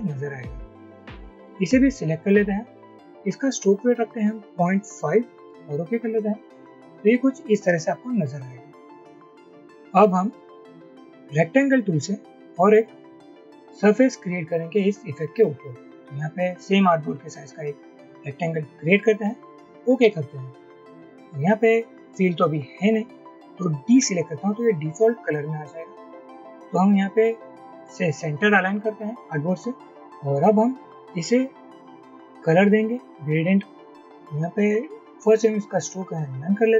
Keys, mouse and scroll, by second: 4.7-5.5 typing, 5.5 Return, 24.1 d.